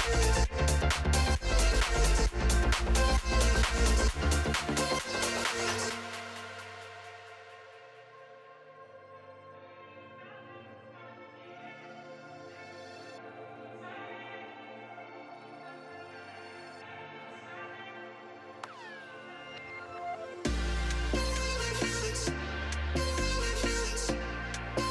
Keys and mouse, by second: 0.1 Tab, 2.9 ctrl+s, 3.7 click, 6.1 click, 12.1 click, 13.0 shift+click, 14.9 ctrl+s, 15.8-16.9 drag, 17.3 click, 17.7 z, 19.1 n, 20.1 ctrl+s, 22.7 click, 23.9-24.9 drag.